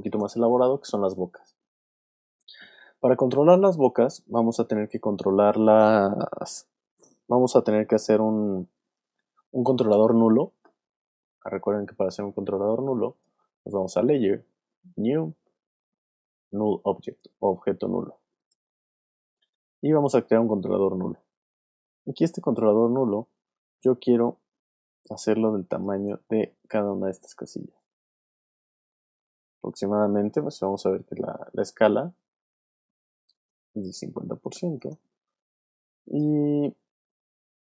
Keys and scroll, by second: 25.2 space, 31.1 p, 34.3 5, 34.8 Return.